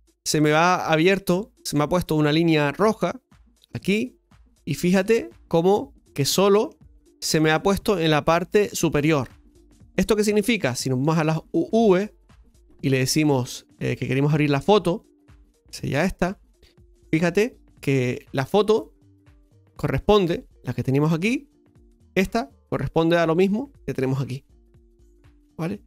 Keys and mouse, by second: 2.4-3.3 middle drag, 4.4-6.8 middle drag, 7.5-11.3 middle drag, 11.3-25.8 drag.